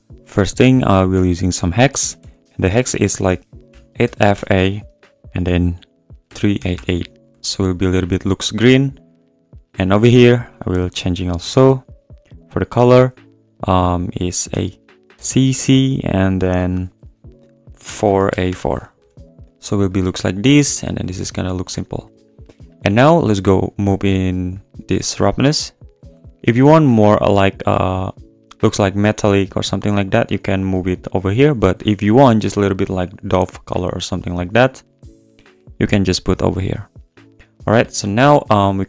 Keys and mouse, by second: 2.0 BackSpace, 2.2 BackSpace, 6.7 8, 9.4 click, 10.3 click, 15.3 c, 20.2 click, 24.5-34.6 drag, 36.6 click, 36.8-37.2 drag, 37.4 click.